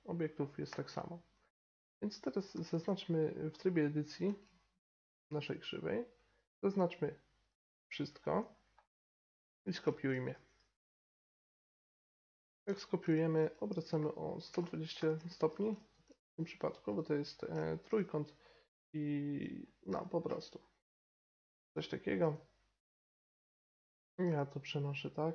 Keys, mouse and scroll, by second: 0.6 Tab, 2.5 a, 2.7 a, 4.2 Tab, 6.1-7.9 drag, 6.7 Tab, 7.9 a, 8.0 a, 10.4 shift+d, 13.7 r, 14.4 click, 15.9 g, 17.3-20.7 middle drag, 22.2 g.